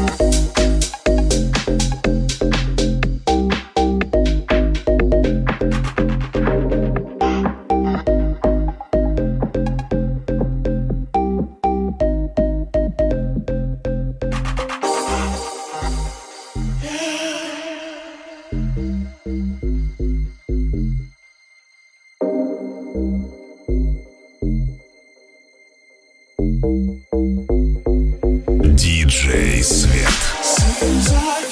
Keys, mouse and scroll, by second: 2.2 right click, 2.3-4.0 middle drag, 2.3 Tab, 3.3 ctrl+Tab, 4.0 right click, 4.0-7.7 middle drag, 4.6 g, 6.9 Tab, 7.1 g, 7.7 right click, 7.7-14.2 ctrl+middle drag, 8.2 Tab, 8.8 Tab, 11.5 right click, 14.3 middle click, 15.7 middle click, 16.4-22.0 middle drag, 22.2-27.8 middle drag, 27.9 middle click, 28.1 shift+middle click, 29.1 middle click, 30.1 middle click, 30.8 middle click, 31.4 g.